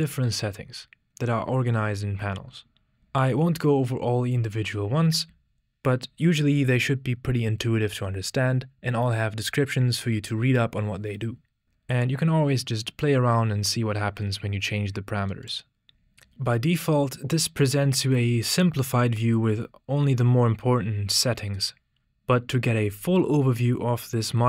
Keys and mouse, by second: 0.0 click, 12.0-15.6 drag.